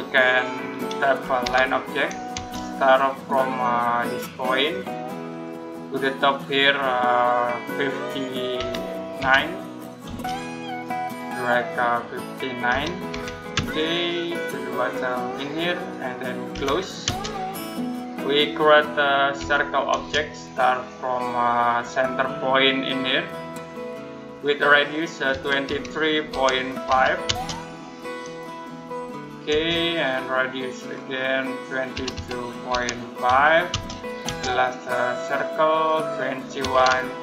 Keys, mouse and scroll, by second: 2.2 space, 5.1 space, 9.9 space, 10.6 middle click, 12.5-13.4 typing, 15.6 click, 16.4 c, 16.9 space, 17.6 middle click, 17.9-18.2 scroll up 1, 18.2 middle click, 19.2 c, 19.8 space, 23.2 space, 25.1-27.2 typing, 30.6 click, 31.8-33.6 typing, 35.5 click, 36.2-37.2 typing.